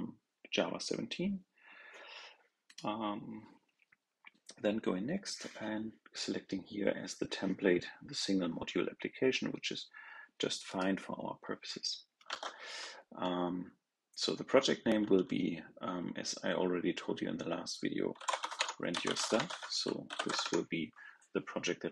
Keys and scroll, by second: 12.2 super+a.